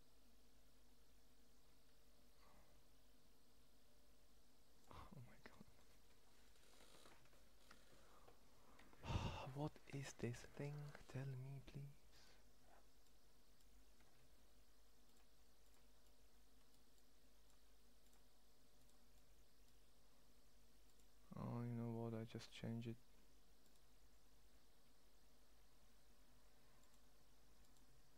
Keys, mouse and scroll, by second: 0.4 click, 4.8-9.2 middle drag.